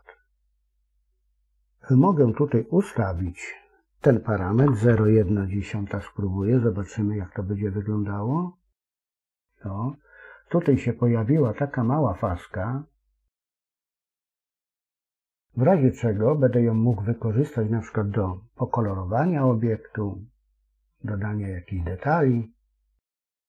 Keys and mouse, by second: 2.5-9.6 drag, 21.7-23.4 middle drag.